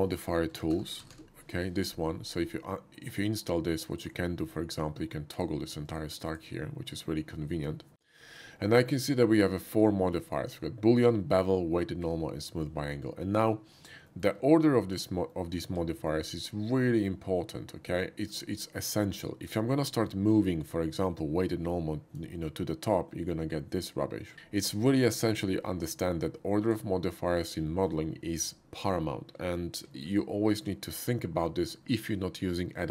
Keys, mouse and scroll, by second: 0.5 m, 0.8 o, 1.0 d, 1.3 i, 4.0 click, 5.3 click, 5.8 click, 6.2 click, 9.1 middle drag, 9.4-9.7 shift+middle drag, 10.1 shift+middle click, 13.3 click, 14.1 shift+middle click, 15.3 shift+middle click, 15.8 shift+middle drag, 18.0-18.3 shift+middle drag, 18.4-19.0 shift+middle drag, 19.2 shift+middle drag, 20.1 shift+middle click, 20.5-21.5 shift+middle drag, 21.5 shift+click, 23.3-24.3 middle drag, 25.3-26.7 drag, 27.4-27.9 middle drag, 29.9 shift+middle click.